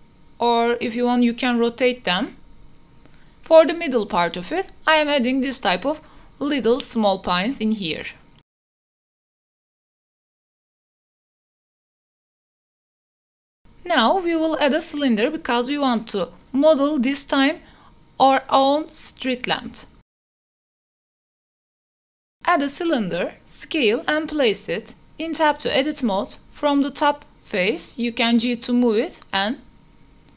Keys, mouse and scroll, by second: 0.0-13.8 typing, 0.2 right drag, 1.3 right click, 3.2 click, 3.9 drag, 13.8 ctrl+s, 14.4-14.9 middle drag, 14.9 shift+a, 18.2 click, 19.6 click, 20.0-22.9 typing, 22.5 click, 23.4 click, 23.6 middle drag, 23.8 shift+middle click, 24.1 g, 24.3 z, 24.9 middle click, 25.1 click, 25.5 shift+middle click, 26.1 shift+middle click, 26.4 middle click, 26.7 3, 27.3 Tab, 28.1 3, 28.5 shift+middle drag, 28.7 middle drag, 29.2 g, 29.3 z.